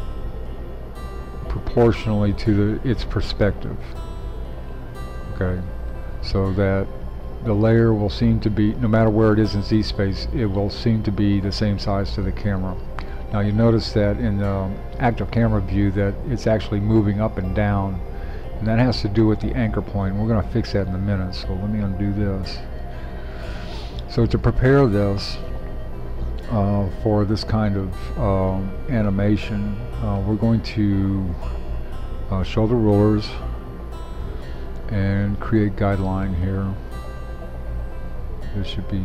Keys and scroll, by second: 22.4 super+z.